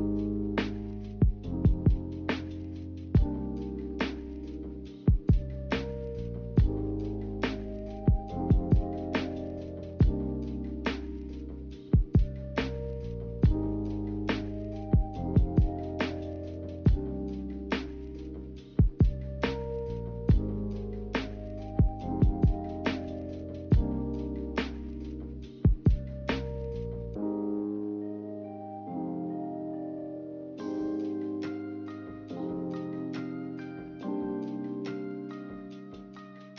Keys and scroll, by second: 2.3-3.7 typing.